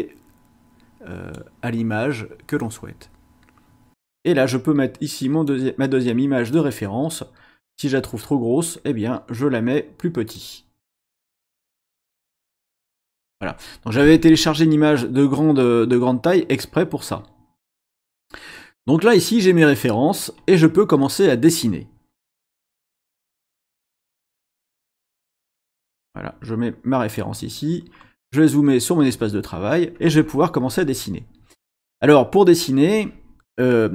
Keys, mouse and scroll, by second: 2.6-3.9 drag, 4.1-5.6 drag, 6.5-7.9 drag, 10.3-13.0 drag, 14.9 scroll down 1, 17.1 scroll down 1, 25.7-27.3 drag, 27.9-28.3 scroll up 1.